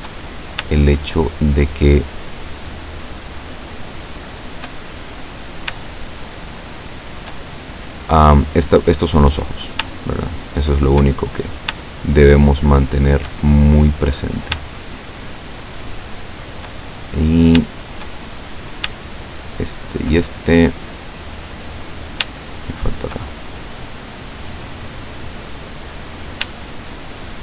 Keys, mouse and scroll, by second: 3.7 shift+right click, 4.8 shift+middle click, 6.2 shift+right click, 6.8 shift+right click, 7.4 shift+middle click, 9.3 middle click, 10.1 shift+right click, 10.6 shift+right click, 11.2 shift+middle click, 12.1 shift+right click, 12.9 shift+right click, 13.6-14.7 shift+middle drag, 16.1 shift+right click, 16.9 shift+middle click, 18.3 shift+middle click, 19.2 shift+right click, 19.7 shift+right click, 20.7-22.4 shift+middle drag, 22.9 shift+right click, 23.3-24.9 shift+middle drag, 25.1-26.4 middle drag, 27.1 shift+right click.